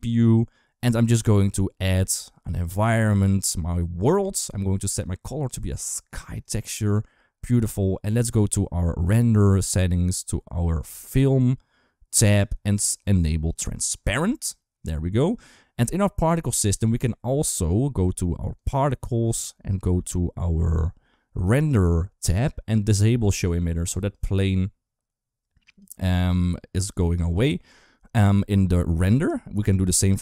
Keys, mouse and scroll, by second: 4.8-6.2 drag, 8.8 click, 12.1 click, 13.3 click, 16.4 click, 18.3 click, 23.2 click, 23.9 click, 25.4 click.